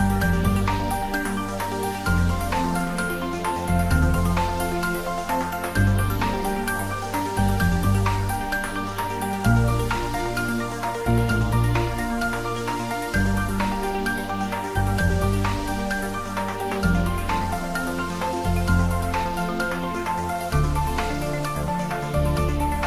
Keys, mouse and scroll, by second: 21.3 m.